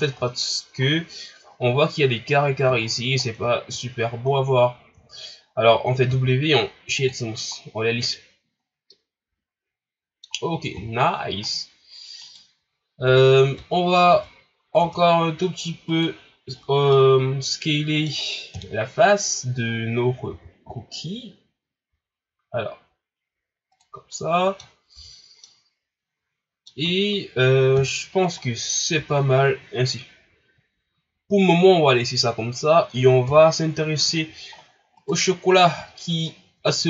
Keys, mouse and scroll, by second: 0.8 ctrl+scroll up 3, 2.8 shift+scroll up 5, 3.2-3.7 scroll down 5, 3.9-4.3 scroll up 4, 4.3 scroll down 4, 5.0-6.0 ctrl+scroll up 2, 6.0 w, 7.6-8.1 scroll down 1, 8.1 scroll up 4, 8.6-8.9 scroll down 2, 8.9-10.7 middle drag, 10.7 KP_1, 11.4 scroll up 3, 12.2 right click, 13.1 Tab, 13.6 Tab, 14.1 Tab, 14.8 Tab, 15.9 right click, 16.6 scroll down 2, 16.9-18.5 middle drag, 18.5 KP_1, 19.2 scroll up 1, 20.3 s, 24.0 scroll down 1, 24.1 middle click, 24.7 scroll up 2, 24.9 Tab, 25.4-26.9 middle drag, 26.9-27.7 scroll down 1, 27.7 KP_1, 28.4 scroll down 3, 28.9 Tab, 33.2 KP_3, 34.5-35.0 scroll up 1, 35.0 right click, 36.3 shift+scroll down 2.